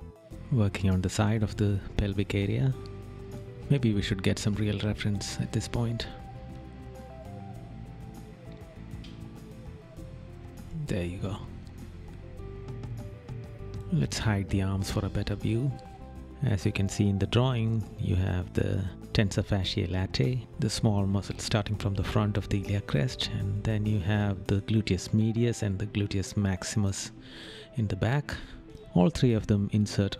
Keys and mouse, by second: 16.4 right click, 21.2 right click, 23.0 right click, 25.5 right click, 26.7 right click.